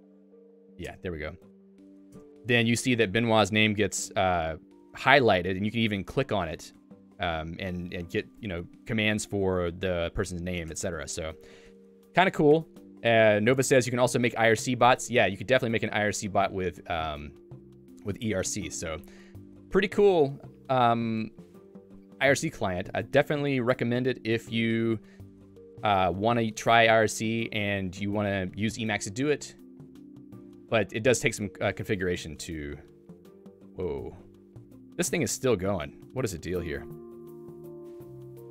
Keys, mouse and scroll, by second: 8.3 click, 10.8 ctrl+g, 11.2 Escape, 12.6 j, 29.7 click.